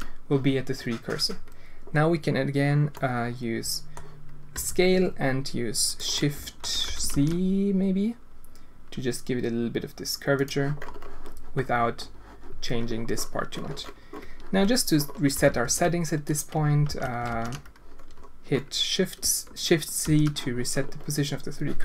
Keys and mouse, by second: 2.9-3.9 drag, 4.5 s, 6.1 alt+shift+click, 6.8 s, 15.3 s, 16.8 ctrl+z, 20.0 shift+c.